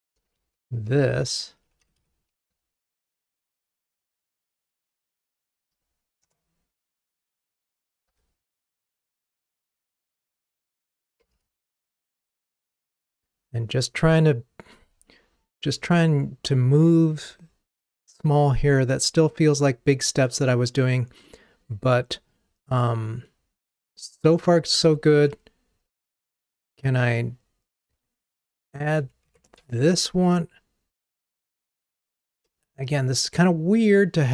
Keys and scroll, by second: 0.3 super+c, 2.5 super+v, 6.3 Return, 10.9 super+/, 11.4 ctrl+r, 29.6 super+c.